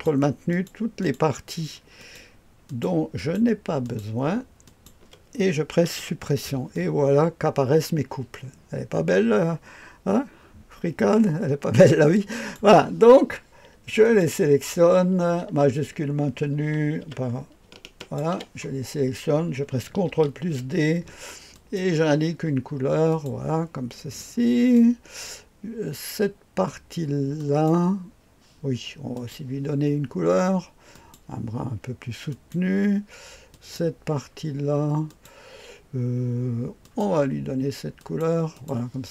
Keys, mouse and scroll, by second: 4.9 ctrl+click, 6.0 Delete, 6.7-12.6 drag, 14.0 click, 15.8 Caps_Lock, 18.0 shift+click, 20.2 ctrl+d, 21.5 click, 23.1 click, 24.2-24.8 drag, 27.4 click, 29.1 click, 30.9 click, 32.3 click, 33.5 click, 35.1 click, 36.8 click, 38.0-38.7 drag.